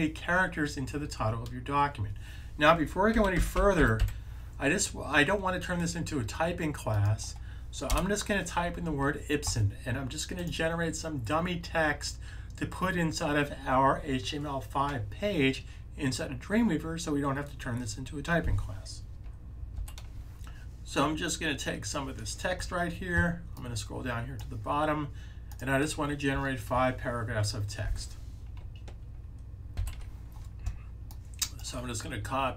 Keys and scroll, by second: 3.0-4.3 typing.